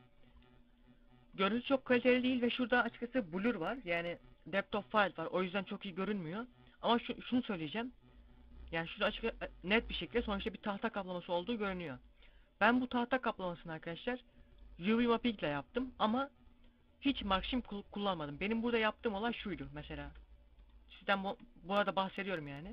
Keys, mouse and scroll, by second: 19.9 Tab, 21.6 scroll down 1.